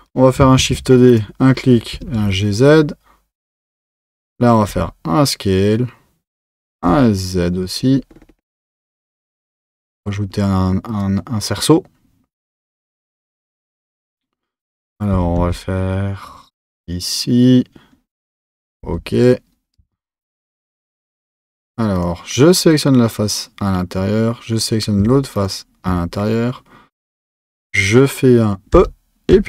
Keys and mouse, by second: 0.6 shift+d, 1.9 g, 6.7 s, 15.1 g, 19.8 Tab, 20.6 2, 22.0 click, 22.5 click, 25.4 shift+click.